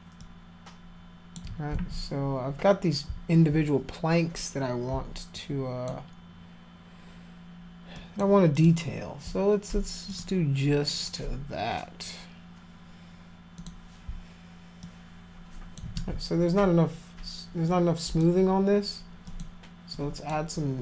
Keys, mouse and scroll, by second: 0.2-1.3 alt+drag, 1.7 ctrl+z, 5.4 alt+click, 8.0 alt+click, 8.6 alt+click, 10.1 click, 13.6 click, 14.8 alt+click, 16.0 ctrl+z, 17.7 click, 19.3 click, 20.0 click.